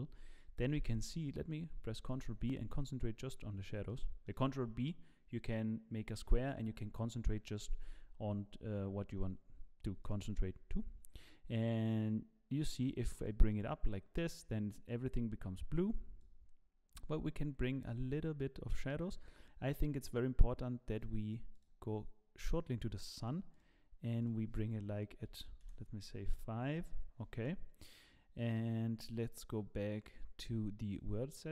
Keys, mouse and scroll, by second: 2.0 ctrl+b, 3.4-3.7 scroll up 4, 3.9 shift+middle click, 8.4-9.1 scroll up 1, 10.0 click, 20.9 click, 21.5 click, 24.7 click, 30.9 click.